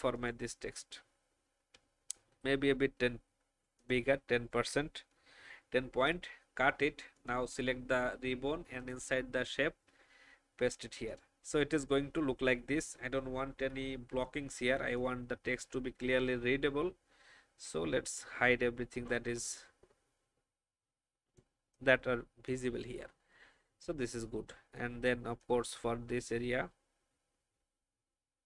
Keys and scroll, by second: 5.8 ctrl+x, 9.7 ctrl+f, 13.5 n.